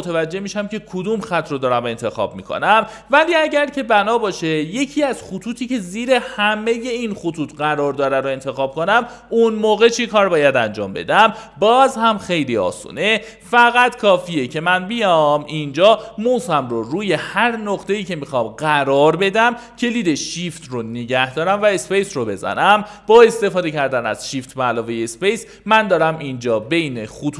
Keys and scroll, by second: 21.7-27.3 typing.